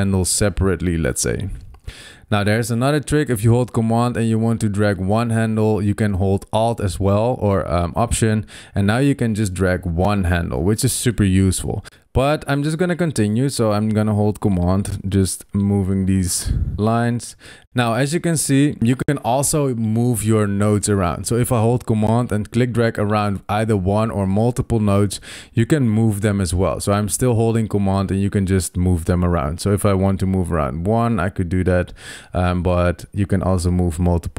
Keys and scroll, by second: 17.5 super+z, 31.9 super+z.